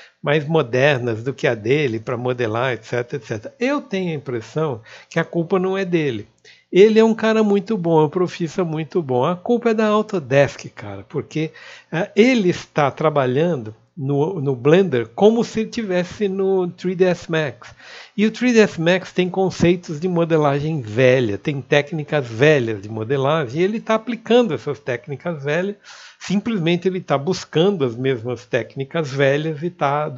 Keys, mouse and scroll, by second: 2.3 click, 12.6 ctrl+b, 23.9 click, 24.6 Tab, 25.2 click, 28.3 q, 28.8-30.1 alt+middle drag.